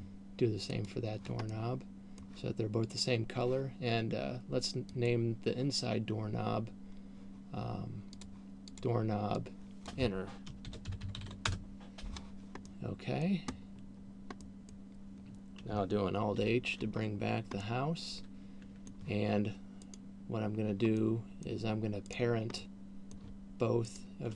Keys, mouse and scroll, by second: 0.0 click, 1.7 middle click, 3.5 right click, 5.5 click, 8.5 click, 9.0 click, 13.0 middle click, 14.0-14.7 scroll down 3, 14.7 middle click, 16.7 alt+h, 17.2 scroll down 1, 18.0 middle click, 20.0 right click, 21.5 middle click, 22.5 right click, 23.0 middle click.